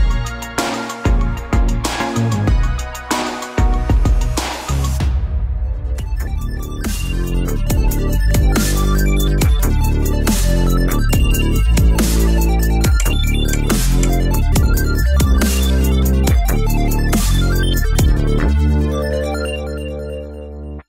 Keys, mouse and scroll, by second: 1.1 click, 1.6 Tab, 1.9 click, 1.9 middle click, 2.5-4.2 middle drag, 5.2 KP_0, 6.7-8.3 middle drag, 8.3-9.8 right drag, 11.1-13.0 middle drag, 13.8-16.5 middle drag, 16.8-17.8 middle drag, 18.0 middle click, 18.1 KP_3, 18.4 middle click, 20.0 middle click, 20.8 middle click.